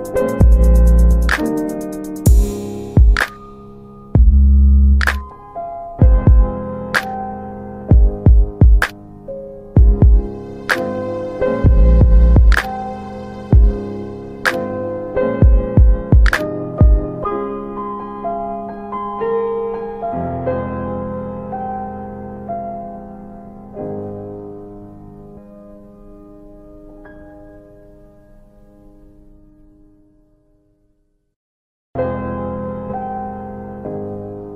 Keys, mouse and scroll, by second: 0.4 alt+middle click, 0.8 ctrl+alt+middle click, 1.7 click, 2.2 ctrl+z, 3.1 ctrl+q, 4.8 alt+w, 5.4 alt+w, 6.1 F3, 7.0 middle click, 7.1 scroll down 2, 7.9 typing, 8.9 scroll down 2, 9.1 middle click, 10.5 scroll up 2, 10.6 middle click, 11.7 middle click, 13.1 click, 15.5 click, 16.0 click, 16.8 alt+w, 17.3 click, 18.1 click, 18.3-18.7 scroll up 2, 18.7 click, 20.3 click, 22.1 click, 22.1 middle click, 22.5 click, 23.1 click, 23.1 middle click, 24.0 alt+middle click, 24.7 click, 25.1 click, 26.8 alt+middle click, 27.4 middle click, 27.4 click, 28.9 alt+middle click, 29.4 middle click, 29.9 click, 31.0 alt+middle click, 31.2 click, 31.3 middle click, 31.8 click, 32.9 alt+middle click, 33.7 middle click, 34.2 click.